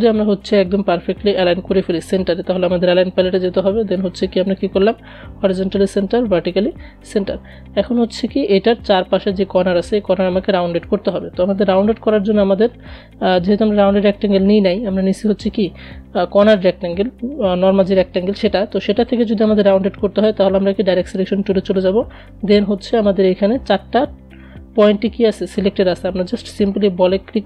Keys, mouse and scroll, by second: 0.9 click, 3.2 click, 19.2 click, 19.3 click, 25.5-27.4 drag.